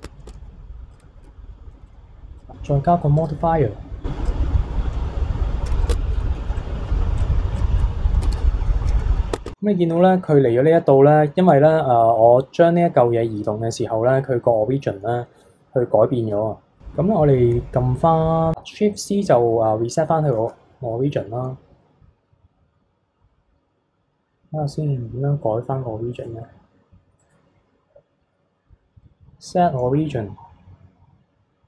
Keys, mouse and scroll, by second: 0.0 Tab, 0.2 Tab, 0.4 s, 3.2-4.3 drag, 4.9-5.7 middle drag, 5.8 middle click, 5.9 Tab, 6.1-7.2 middle drag, 7.5 click, 7.8-8.2 middle drag, 8.2 KP_3, 9.3 Tab, 9.4 Tab, 20.3 shift+s, 27.2-31.6 right drag.